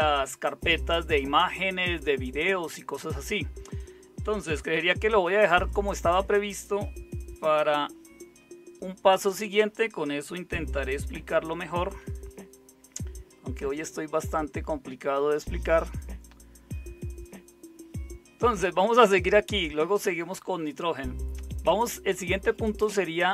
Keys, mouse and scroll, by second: 11.4 super+7.